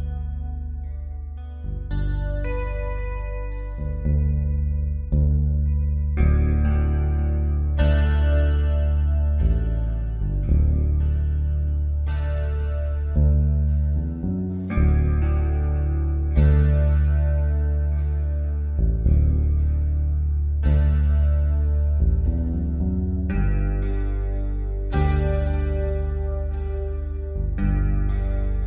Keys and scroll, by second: 15.5 ctrl+z, 24.2 space.